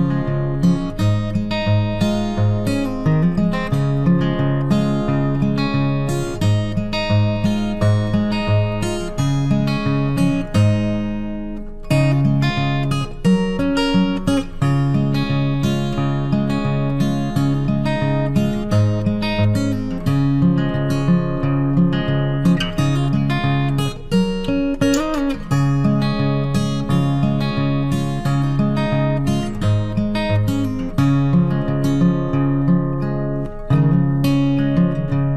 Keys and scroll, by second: 8.7 ctrl+t, 26.7 ctrl+t.